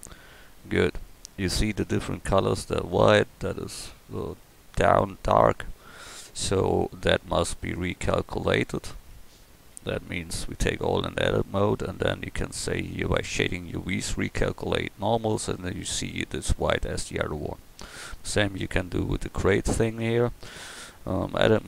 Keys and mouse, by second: 6.6 a, 7.0 a, 7.6 right click, 9.1 Tab, 9.7 a, 10.0 a, 12.9-17.0 drag, 15.2 Tab, 18.0-20.0 right drag, 20.0 Tab, 21.3 a.